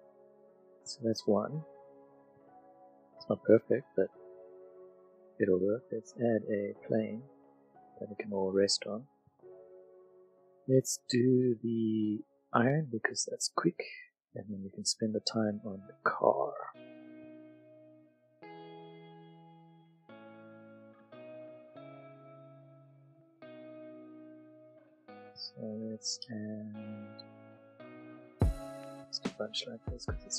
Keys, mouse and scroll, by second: 0.0 middle click, 0.4 click, 0.6 middle click, 1.0 middle click, 2.5 middle click, 3.6 click, 6.0 click, 7.2 s, 8.2 click, 8.6 middle click, 8.9 middle click, 9.3 click, 10.0 middle click, 11.0 click, 12.9 middle click, 14.1 middle click, 16.5 Tab, 17.1-19.2 drag, 20.4 e, 21.1 click, 26.1 ctrl+r, 27.8 middle click, 28.7 click, 29.4 click.